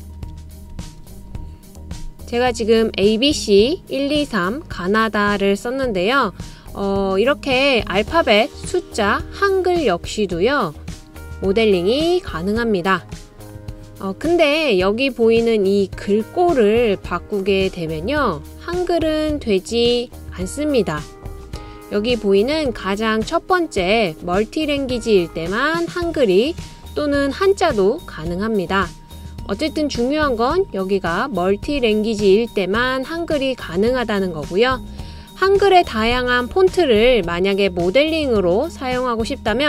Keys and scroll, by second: 0.0-2.6 typing, 6.9-7.7 typing, 13.2-13.9 typing.